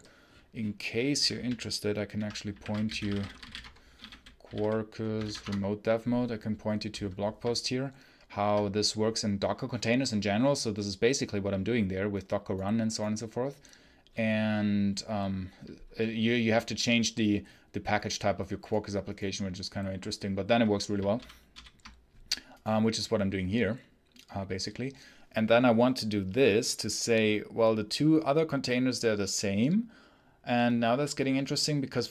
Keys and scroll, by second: 21.4 l.